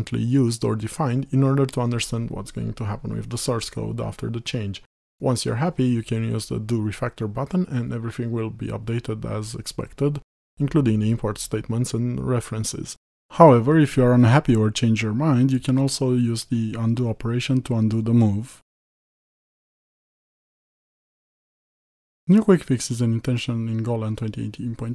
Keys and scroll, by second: 14.9 ctrl+z.